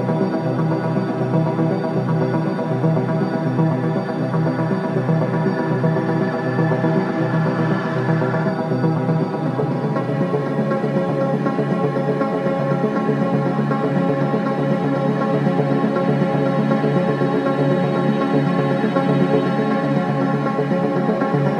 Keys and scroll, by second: 0.0 0, 0.1 Return, 0.8 Return, 3.2 2, 5.8 4, 6.7 ctrl+d, 6.8 Escape, 11.7 ., 15.4 1, 15.5 0, 15.6 Return.